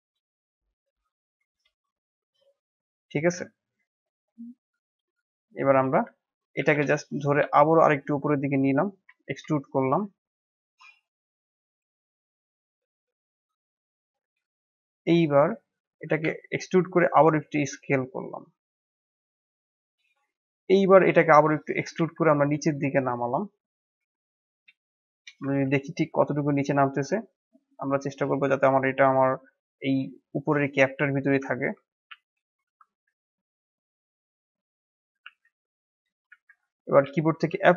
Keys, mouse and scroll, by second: 0.8 click, 1.5 KP_7, 2.5-3.5 middle drag, 3.5 alt+click, 3.9 middle click, 4.8 alt+click, 5.6-6.6 middle drag, 6.6 e, 9.2 KP_1, 10.2-10.5 scroll up 1, 10.5 shift+middle click, 11.0-12.8 scroll up 2, 13.7-15.9 middle drag, 15.9 e, 20.6-21.6 middle drag, 21.6 e, 24.6 KP_1, 25.4 shift+z, 28.2 g, 29.7-31.2 middle drag, 31.2 Tab, 32.0 shift+z, 32.6 Tab, 32.9-35.2 middle drag, 35.2 shift+z, 36.2 shift+z, 36.6 middle click, 37.5 f.